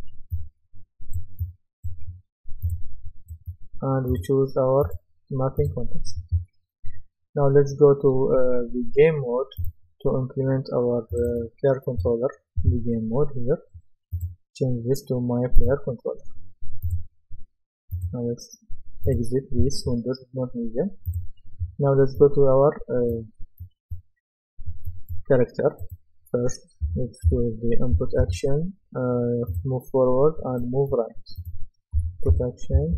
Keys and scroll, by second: 27.0-27.8 typing, 32.1-32.8 typing.